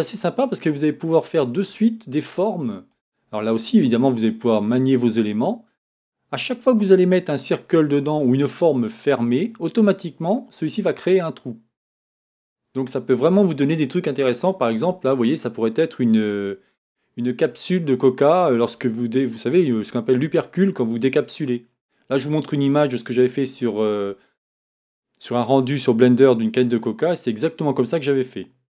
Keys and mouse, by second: 2.3-3.5 drag.